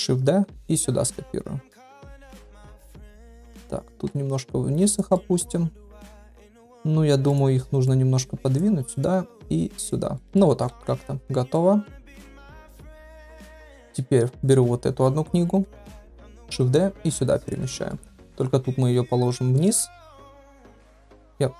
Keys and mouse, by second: 2.1 shift+middle drag, 2.8-3.3 shift+middle drag, 3.9 g, 5.1-5.5 middle drag, 6.6 click, 7.8 click, 8.9 click, 9.4 click, 10.2 middle click, 10.7 ctrl+s, 11.5-11.9 middle drag, 12.1 shift+middle drag, 13.9 click, 14.6 KP_1, 15.6 KP_3, 16.5 shift+d, 17.7 shift+middle drag, 18.5 r, 19.9 g.